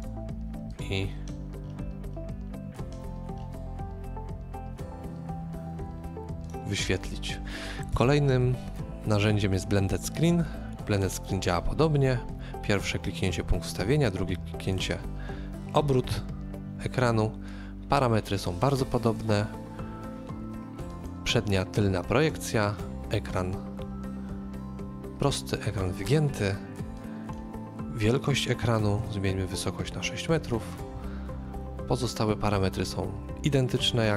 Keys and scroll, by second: 7.9 BackSpace, 14.0 BackSpace, 16.1 shift+KP_3, 28.9 KP_6, 29.0 Return.